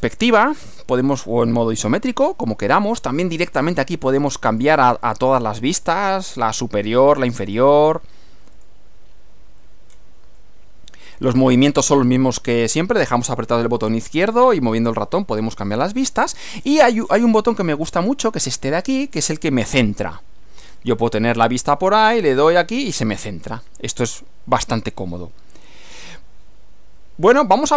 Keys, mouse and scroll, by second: 1.7 click, 2.2 scroll down 2, 3.6 click, 4.5 click, 5.0 click, 5.8 click, 7.0 click, 7.5 click, 8.6 click, 9.9 scroll down 1, 10.4-15.8 drag, 16.5 scroll up 2, 16.8-17.3 scroll down 2, 19.2 click, 20.8 right click, 22.5 click, 23.3-26.4 drag.